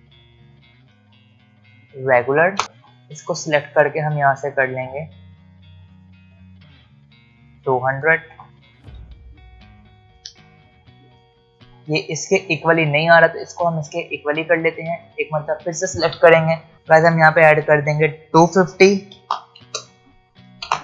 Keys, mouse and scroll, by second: 1.7 click, 4.2-5.9 scroll down 1, 5.9 click, 8.7 alt+scroll up 1, 8.9 space, 9.1 click, 14.4 click, 17.3 click, 19.6 Return.